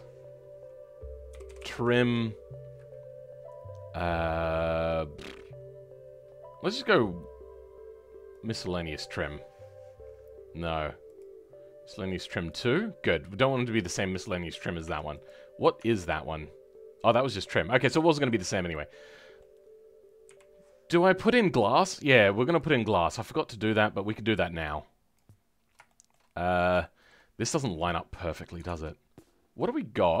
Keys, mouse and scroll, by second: 12.8 scroll up 2, 14.7 Tab, 17.6-17.9 scroll down 2, 17.9-20.2 shift+middle drag, 20.2 KP_3, 20.7-22.4 scroll up 2, 22.4-25.8 drag, 25.8 shift+middle click, 26.2-26.7 scroll up 3, 26.7-28.2 shift+middle drag, 28.2-30.2 scroll down 3.